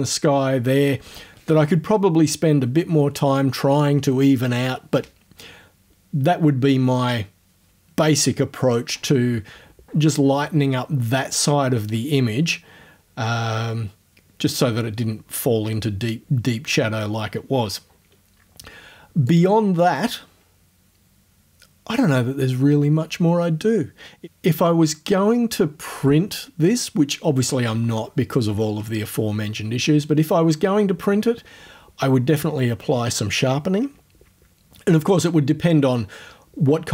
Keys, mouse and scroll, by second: 19.3 click.